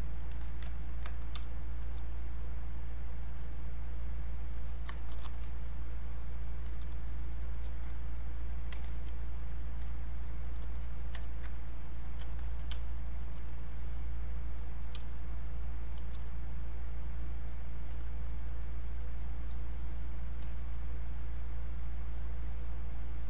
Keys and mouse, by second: 0.7 ctrl+alt+right click, 1.4 ctrl+space, 1.8 ctrl+click, 1.9 ctrl+space, 2.3-4.5 ctrl+drag, 5.1 shift+f, 5.4 shift+click, 6.9 shift+space, 7.4 shift+click, 7.9-11.2 shift+drag, 11.2 ctrl+right click, 11.6 click, 12.1 alt+click, 12.7 space, 13.1 click, 13.2 space, 13.5 click, 15.0 space, 15.3 click, 15.5 space, 16.2-23.2 drag.